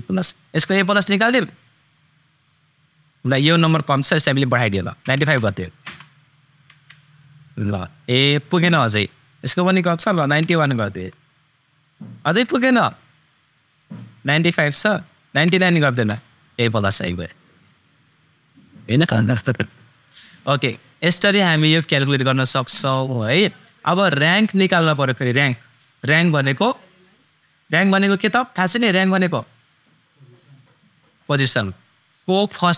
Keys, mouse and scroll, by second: 1.6 super+click, 9.4 super+click, 13.8 super+click, 22.6-24.1 super+drag.